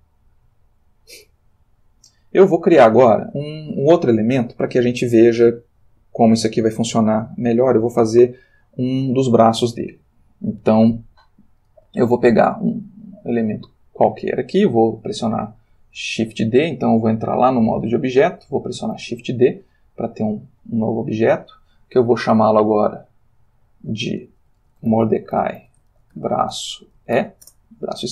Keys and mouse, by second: 2.0-3.7 shift+middle drag, 17.2 click, 17.7 click, 18.8 space, 19.0 shift+d, 21.4 Escape, 22.9 click, 24.6-27.1 typing, 27.4 Return.